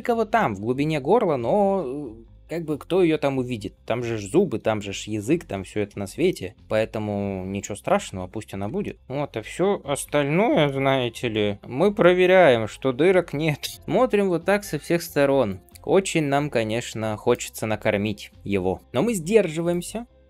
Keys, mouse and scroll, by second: 0.2-1.3 middle drag, 1.3 scroll down 2, 4.6-6.1 scroll down 4, 6.2-7.7 middle drag, 7.7-8.2 scroll down 2, 8.7-9.8 shift+middle drag, 9.9-10.5 scroll up 4, 10.5-12.9 middle drag, 13.7-17.3 ctrl+middle drag, 13.7 scroll up 2, 18.8 ctrl+space, 18.8 middle click, 18.8 scroll up 1, 19.6 click.